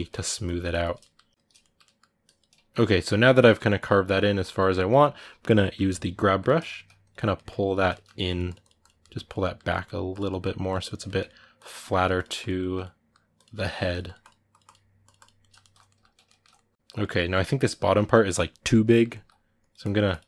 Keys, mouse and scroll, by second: 0.2 ctrl+click, 0.4 middle click, 0.6 shift+click, 0.8 middle click, 1.2 ctrl+shift+click, 1.4 ctrl+middle click, 2.0 ctrl+click, 2.6-4.2 ctrl+middle drag, 4.2 ctrl+click, 4.4-5.7 ctrl+middle drag, 5.7 g, 6.2 click, 6.3 middle click, 6.8 click, 7.1 middle click, 7.6 click, 7.7 ctrl+middle click, 8.1 click, 8.8 middle click, 9.1 click, 9.2 middle click, 9.9 click, 10.1 middle click, 10.5 click, 10.6 ctrl+middle click, 11.4 click, 11.6 ctrl+middle click, 11.9 click, 12.4 middle click, 13.1 click, 13.3 middle click, 13.7-15.2 drag, 15.2-19.4 ctrl+middle drag, 19.4-20.2 drag.